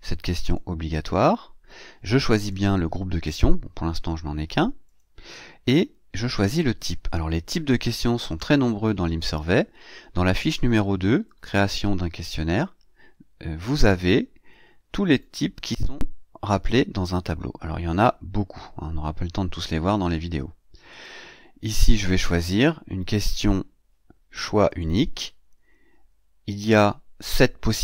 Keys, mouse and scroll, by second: 0.3 click, 2.2 click, 4.7 click, 11.1 click, 15.5-15.8 scroll up 2, 16.4-17.3 scroll down 4, 20.8 click, 22.1 click, 24.5 click.